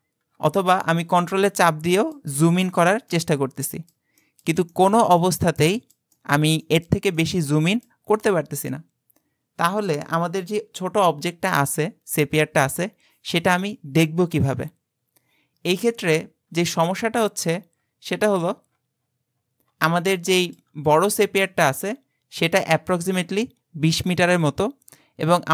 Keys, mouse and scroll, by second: 1.4-10.8 ctrl+middle drag, 16.4-20.2 scroll down 58, 20.2-21.0 shift+middle drag, 21.0 click, 21.5-24.7 shift+middle drag.